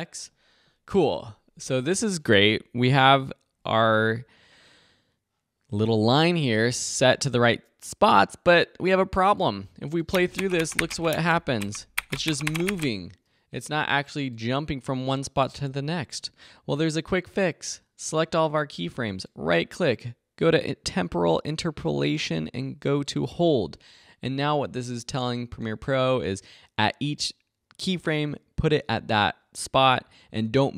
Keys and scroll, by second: 10.0 space, 13.1 space.